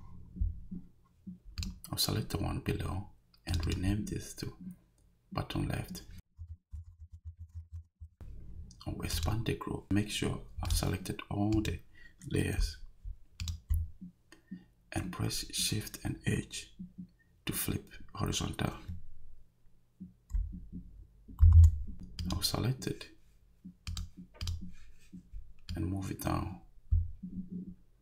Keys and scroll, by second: 6.1-8.1 typing, 21.4 shift+h.